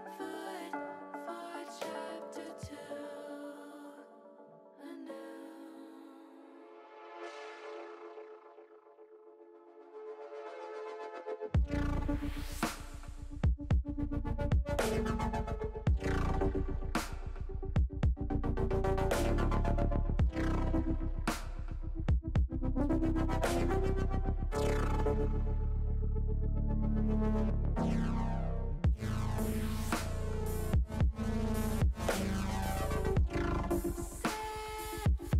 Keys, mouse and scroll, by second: 2.8 click, 3.6 click, 4.3 click, 5.6-6.9 middle drag, 7.6 click, 8.3 click, 8.8 middle click, 9.6 middle click, 10.8 middle click, 11.4 e, 12.9 click, 13.7 s, 14.6 click, 15.0 s, 16.9 click, 17.4 e, 22.9 click, 23.2-24.3 middle drag, 24.7 click, 26.0 click, 26.7-28.7 middle drag, 29.2 s, 29.9 click, 30.7 e, 32.3 click, 32.6 s, 34.3 click.